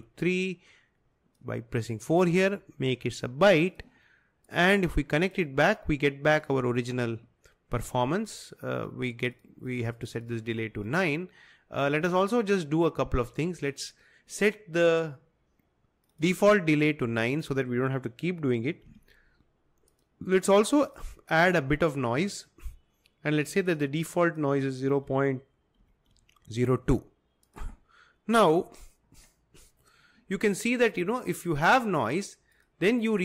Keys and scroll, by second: 18.9 9, 25.1-26.7 typing, 28.3 typing.